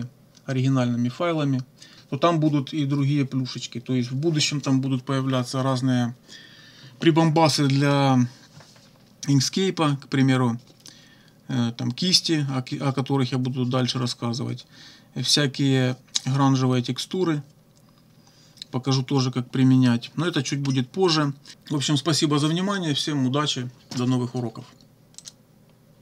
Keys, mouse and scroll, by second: 25.2 click.